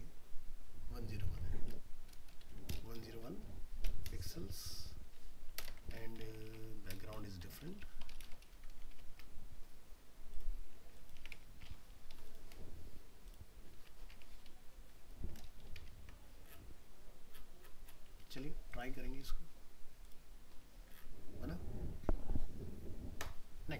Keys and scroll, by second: 1.3 alt+Tab, 13.8 ctrl+c, 14.1 alt+Tab, 14.9 ctrl+v, 16.0 ctrl+s.